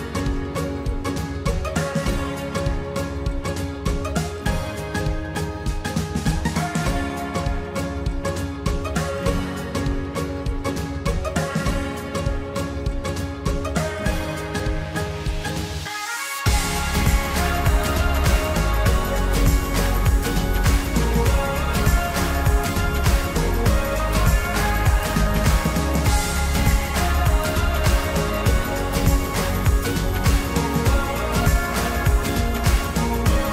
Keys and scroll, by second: 11.9 ctrl+t, 29.0 ctrl+t.